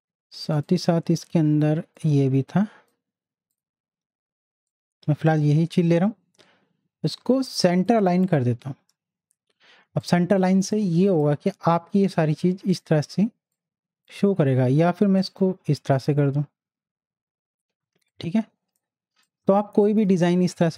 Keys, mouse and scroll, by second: 7.7 click, 9.6 z, 10.0-15.3 drag, 17.8 z, 18.1-20.7 drag.